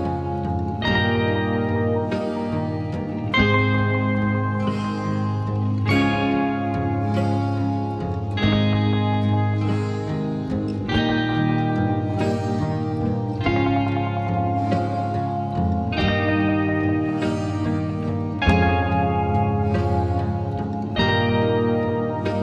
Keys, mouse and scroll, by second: 2.8-8.8 drag, 8.8-11.8 drag, 8.8 typing, 11.8 typing, 17.2 typing, 17.5 click, 20.3-21.1 alt+scroll down 1, 21.1 typing.